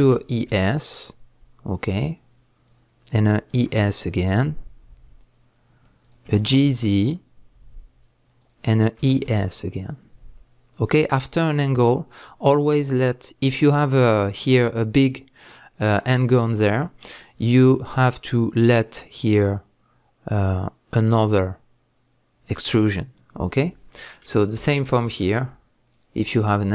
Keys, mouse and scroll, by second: 3.2 click, 3.5 e, 6.1 click, 6.2 g, 8.5 click, 9.0 e, 10.9 click, 17.2-21.2 scroll up 2, 23.2-23.5 scroll down 2, 23.5-25.9 middle drag, 24.4 scroll up 2, 25.9 alt+click, 26.3-26.7 middle drag.